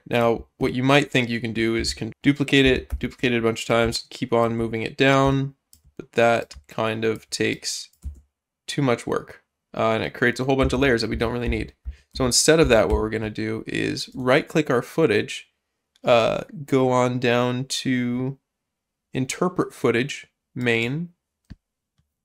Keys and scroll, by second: 1.7 ctrl+c, 2.6 ctrl+d, 2.9 ctrl+d, 8.5 space, 10.5 space, 11.1 ctrl+z, 11.4 ctrl+z, 11.8 ctrl+z, 12.1 ctrl+z, 12.6 ctrl+z, 12.8 ctrl+z.